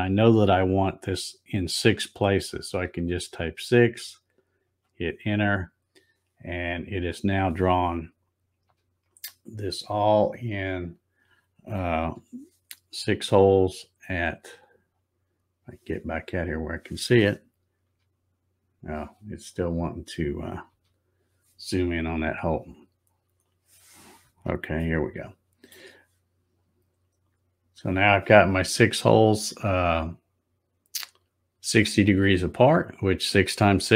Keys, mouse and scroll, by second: 8.7 z, 10.8 click, 12.0 z, 14.1 scroll down 3, 14.6-15.5 scroll up 16, 16.4 scroll down 1, 17.9 z, 19.5 click, 20.7 z, 21.8 scroll up 1, 22.4-23.2 scroll up 12, 24.8 shift+middle click, 26.4 scroll up 2, 26.8-28.0 scroll down 3, 28.0 scroll down 1.